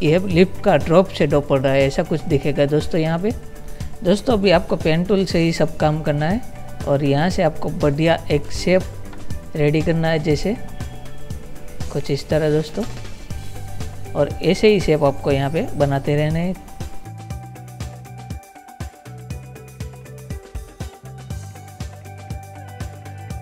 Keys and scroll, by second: 3.6 Delete, 18.9 ctrl+z, 20.2 ctrl++, 22.4 ctrl+z.